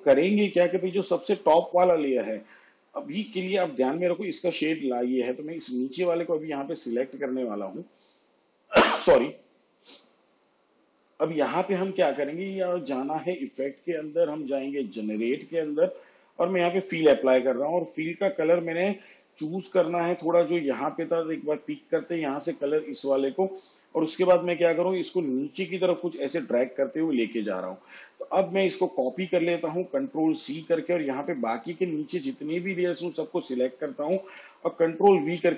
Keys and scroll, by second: 30.1 ctrl+c, 35.3 ctrl+v.